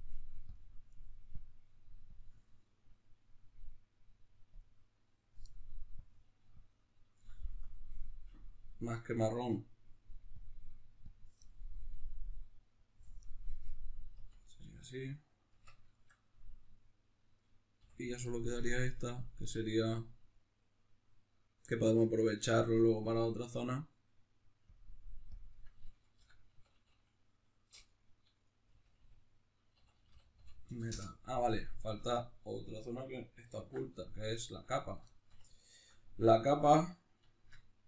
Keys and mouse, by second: 0.5-4.5 drag, 6.0-12.3 drag, 13.5-17.3 middle drag, 14.3 Tab, 15.5 Tab, 17.3 right click, 17.8 l, 19.0-34.0 drag, 30.9 Return, 33.6 alt+h, 34.0 middle click, 34.7 right click, 35.1-37.8 shift+middle drag.